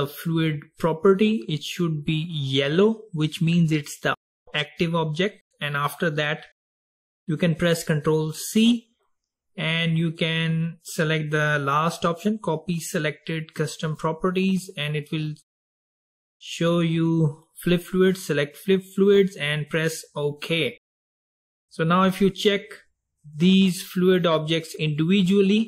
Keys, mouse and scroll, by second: 8.2 ctrl+c, 21.5 click, 22.3 click, 23.5 click, 24.3 click, 25.1 click.